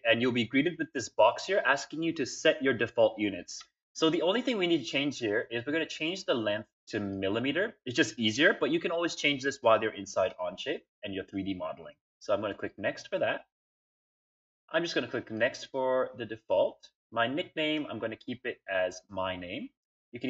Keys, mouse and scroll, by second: 4.6 click, 6.9 click, 12.3 click, 15.1 click.